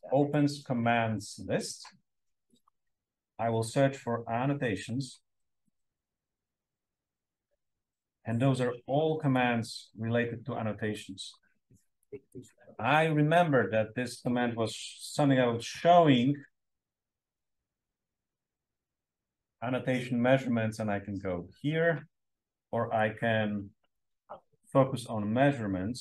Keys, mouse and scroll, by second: 2.4 click, 3.0-6.4 typing, 11.9 click, 15.5-16.5 typing, 17.6-18.6 typing, 22.9 click, 24.3 m, 24.7 e, 25.3 a, 25.9 s.